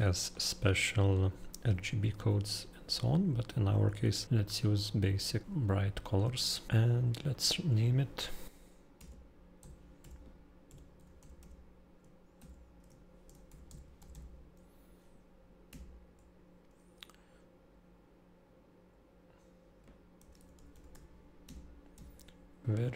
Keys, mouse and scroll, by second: 0.0 middle click, 0.3-0.9 scroll, 3.2-3.9 scroll down 1, 3.9 middle click, 4.1 scroll down 1, 4.2 middle click, 4.7-5.5 scroll, 4.7 middle click, 5.3 shift+middle click, 5.4 middle click, 5.6 middle click, 6.7 Escape, 6.7 scroll, 6.9 click, 8.9-14.6 typing, 15.9 -, 19.9-21.9 typing.